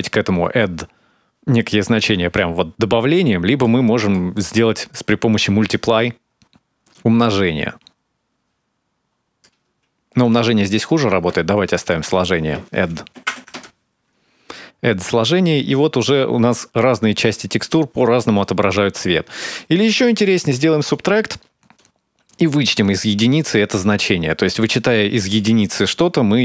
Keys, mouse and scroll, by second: 2.1 shift+click, 3.8 click, 6.7 click, 10.0 click, 11.5 click, 14.3 middle click, 16.5-17.0 scroll up 2, 17.1 middle click, 19.9 click, 21.6 click, 24.2 click.